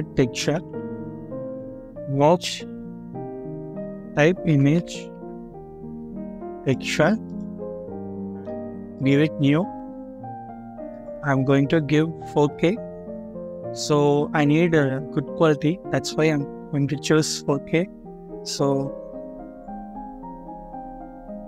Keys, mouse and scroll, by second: 0.6 a, 4.4-5.4 typing, 7.6 scroll up 1, 8.1 middle click.